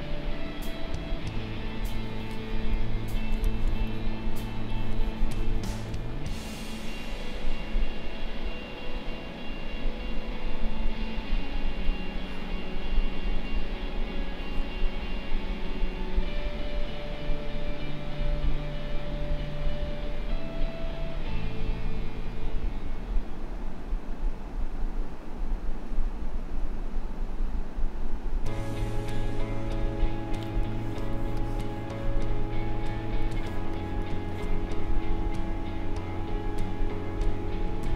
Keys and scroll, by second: 3.7 space, 11.8 space, 30.6 space.